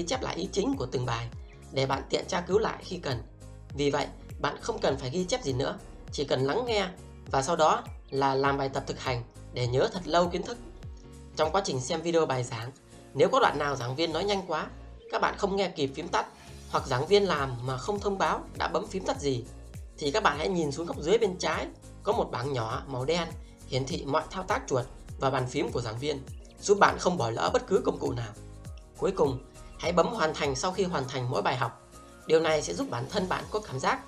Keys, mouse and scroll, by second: 11.0 click, 11.5 click, 11.9 double click, 11.9 click, 12.0 click, 12.1 double click, 13.3 click, 13.3 double click, 13.7 click, 17.3-18.5 typing, 20.5-25.2 typing, 25.1 click, 26.2 click, 27.2 double click, 28.1 click.